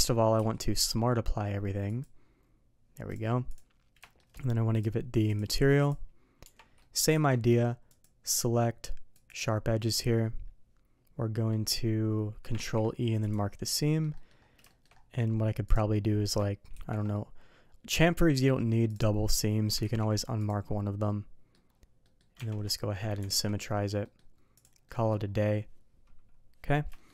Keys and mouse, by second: 0.3 q, 3.1 click, 3.5 click, 4.0 shift+middle drag, 4.8 drag, 5.2-5.9 drag, 6.4 Tab, 6.8 middle click, 7.1 alt+a, 7.9-9.3 drag, 11.5 middle click, 12.5 ctrl+e, 13.6 middle click, 14.1 middle drag, 14.6 shift+middle click, 15.6 click, 16.7 ctrl+e, 19.3 click, 19.8 ctrl+e, 21.0-21.5 middle drag, 22.0 middle drag, 22.3 Tab, 22.9 middle drag, 23.2 alt+x, 24.0 middle click, 24.5 click, 24.8 middle drag, 26.9 shift+middle click.